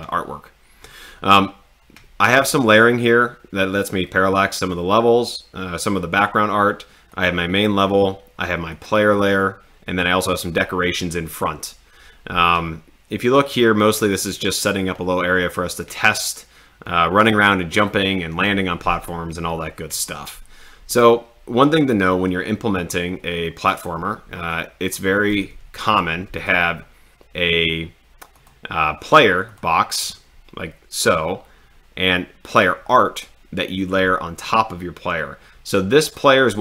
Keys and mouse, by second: 7.1 click, 8.8 click, 10.3 click, 25.0-25.5 drag, 28.3-28.9 drag.